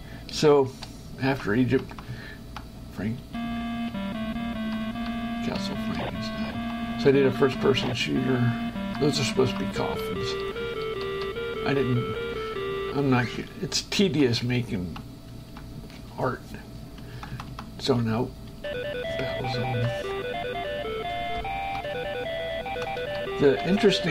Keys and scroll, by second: 1.5 Right, 3.4 space, 4.2 Up, 5.2 Left, 6.2 Right, 7.9 space, 8.2 Up, 9.9 Left, 13.0 shift+Escape, 14.3 Right, 18.3 space, 20.0 Right, 23.3 Left.